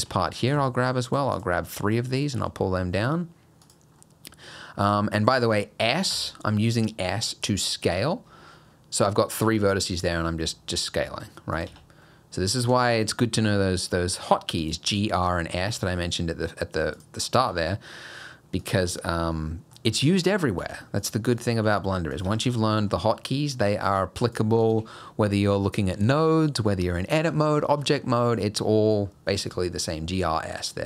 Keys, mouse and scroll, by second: 0.4 click, 1.1 shift+click, 1.4 shift+click, 1.7 middle click, 2.4 e, 4.0 middle click, 6.1 s, 11.7 Tab, 12.0 middle click, 13.5 Tab, 13.9 scroll up 1, 14.2 middle click, 14.6 click, 15.3 g, 17.3 click, 17.5 g, 18.8 Tab, 19.1 middle click, 19.9 Tab, 20.2 click, 20.6 g, 21.4 click, 21.6 g, 22.3 Tab, 22.5 middle click, 22.9 scroll down 2, 23.2 middle click, 23.9 Tab, 24.3 click, 24.6 shift+click, 26.3 middle click, 27.3 middle click, 28.1 middle click, 28.5-29.5 scroll up 1, 30.2 shift+click, 30.6 shift+click.